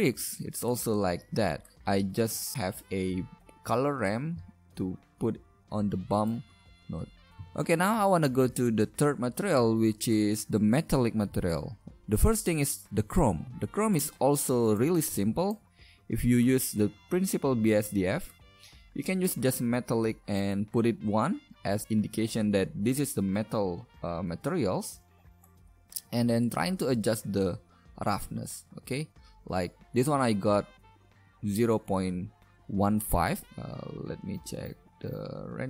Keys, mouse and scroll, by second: 2.5-6.4 drag, 6.4 middle click, 7.4 KP_0, 11.0 middle click, 15.1 g.